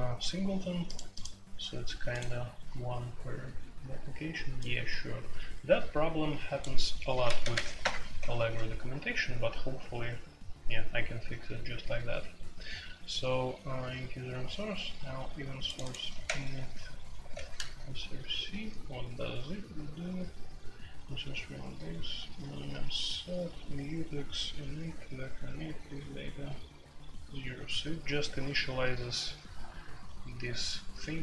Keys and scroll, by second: 7.1-7.6 typing, 7.8 Return, 16.2 ctrl+c, 17.1 ctrl+g, 17.3 ctrl+v, 18.3 F3.